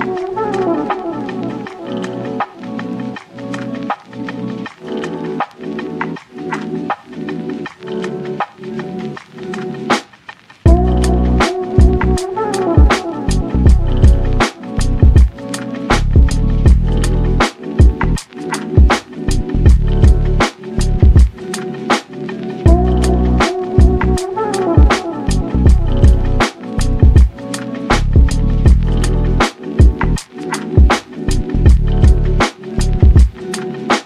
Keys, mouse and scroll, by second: 0.3 g, 1.8 click, 2.3 g, 3.9 Tab, 4.2 z, 4.5 scroll down 2, 4.7-5.2 middle drag, 5.2 click, 5.4-5.7 scroll up 1, 5.7 click, 6.0 s, 7.3 g, 9.0-10.3 middle drag, 10.3-11.2 scroll up 1, 11.2 ctrl+a, 11.9 Tab, 12.4 2, 12.6 click, 13.2 shift+click, 13.6 shift+click, 14.4 ctrl+b, 16.1 Tab, 16.3 click, 16.6-17.5 middle drag, 17.5 click, 18.1-19.9 shift+drag, 20.1-21.6 middle drag, 23.0 click, 23.3-23.9 middle drag, 23.9 shift+d, 24.6 g, 26.3-27.0 drag, 27.0 Tab, 27.6 3, 27.7 click, 28.2 x, 29.7 click, 29.9 x, 30.3 click, 30.5 x, 31.0 click, 31.1 x, 31.5 Tab, 31.8 ctrl+a, 32.7-33.7 right drag, 33.7-34.0 scroll up 2.